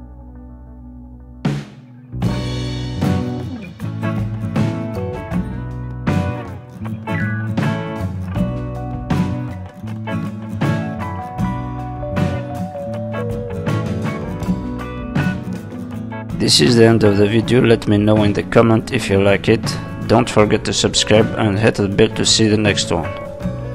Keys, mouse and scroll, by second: 0.4 click, 1.1 click, 3.3 middle click, 4.3 click, 4.5 middle click, 4.9 click, 6.3-7.0 scroll down 3, 6.6 middle click, 7.0-7.5 scroll up 2, 7.5 scroll up 1, 7.6 middle click, 10.4 click, 10.7 middle click, 11.5 middle click, 11.7 click, 13.0 click, 13.4 middle click, 14.4 click, 15.4 scroll down 3, 15.6 middle click, 16.2-16.6 scroll down 2, 16.4 middle click, 19.4-20.3 scroll up 3, 19.7 middle click, 20.7-21.0 scroll down 2, 21.0 middle click, 21.8 Tab, 22.0 scroll down 3, 22.3 middle click, 23.0 shift+middle click, 23.3 middle click.